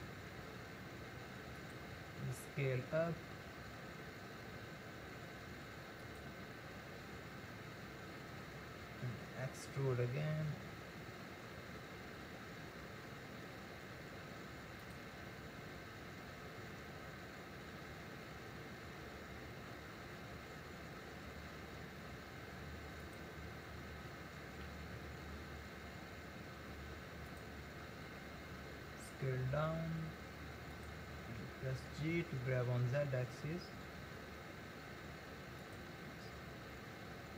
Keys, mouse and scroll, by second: 2.2 s, 9.4 e, 18.0 e, 24.5 g, 28.6 s, 31.4 g.